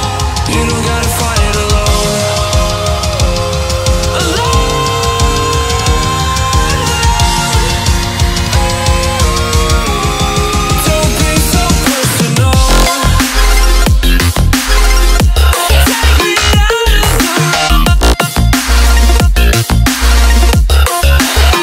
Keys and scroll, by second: 7.3 alt+a, 12.1 ctrl+a, 13.1 alt+a.